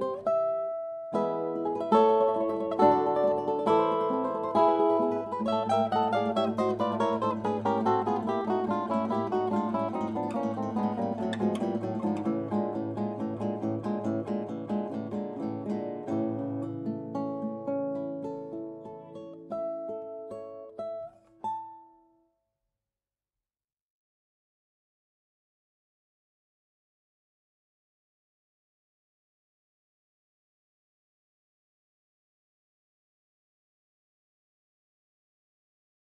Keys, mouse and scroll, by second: 2.1 g, 8.4-11.1 middle drag, 11.1 s, 15.1-17.4 drag, 17.9-20.2 drag, 26.1 Tab, 28.2-30.5 drag, 29.6-31.9 right drag, 32.0 r.